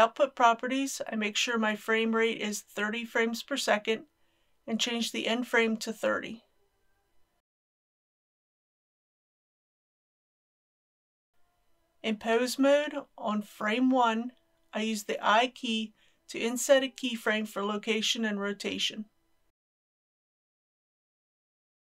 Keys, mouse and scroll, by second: 1.6 click, 10.0 KP_3, 10.2 KP_0, 11.3 click, 14.9 i, 16.8 click, 19.5 n.